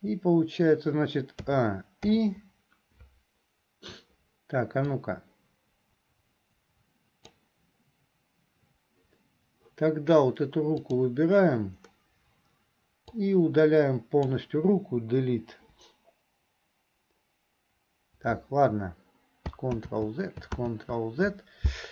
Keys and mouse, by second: 1.6 a, 2.4 i, 5.1-7.6 drag, 5.1-7.6 right drag, 10.8 click, 10.8 right click, 13.1-14.3 drag, 13.1-14.3 right drag, 15.6 Delete, 19.7 ctrl+click, 20.7 ctrl+z.